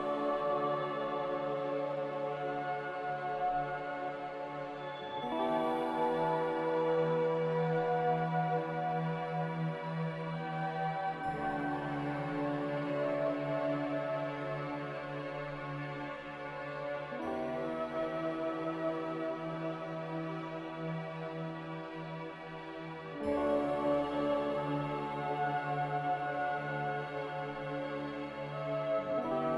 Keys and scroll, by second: 16.0 z.